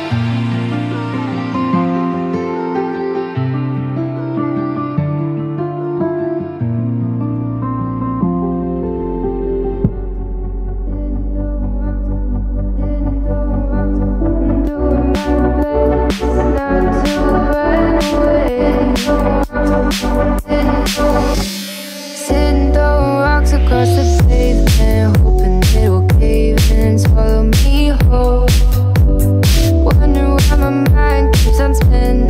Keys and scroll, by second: 18.2 Left, 19.0 Right, 19.3 Left, 21.0 Right, 22.4 Left, 24.4 Right, 27.1 Right, 28.2 Left, 30.0 Left, 31.1 Left.